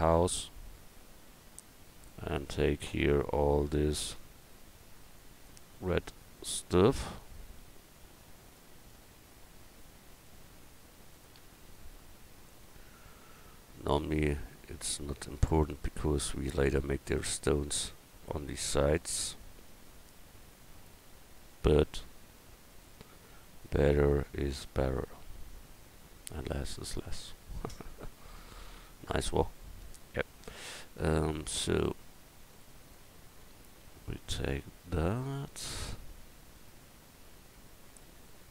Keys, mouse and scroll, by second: 12.2-15.7 middle drag, 17.9-21.5 middle drag, 23.2-24.9 right drag, 24.9 middle click, 27.0 right click.